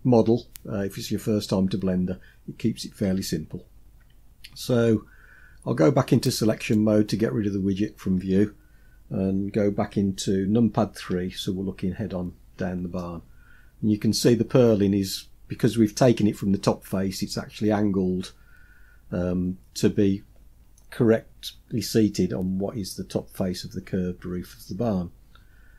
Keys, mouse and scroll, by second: 6.7 click, 11.2 KP_3, 12.3-14.2 scroll up 6, 24.3-25.7 scroll down 6.